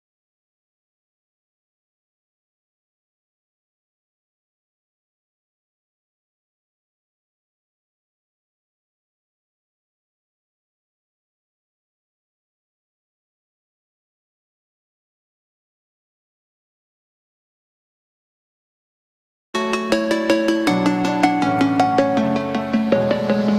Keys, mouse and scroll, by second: 0.0 1, 0.7 Return, 0.9 space, 1.6-2.4 scroll down 1, 2.4 click, 3.4 right click, 4.1 click, 7.3 m, 7.4 click, 8.4 Left, 9.3 click, 9.4 space, 9.6 middle click, 10.1 scroll up 1, 10.7 middle click, 11.7 m, 11.8 click, 13.6 space, 13.9 click, 14.2 middle click, 14.8 scroll up 1, 15.1 shift+middle click, 16.1-17.9 shift+middle drag, 17.9-18.5 scroll up 1, 18.6 shift+middle click.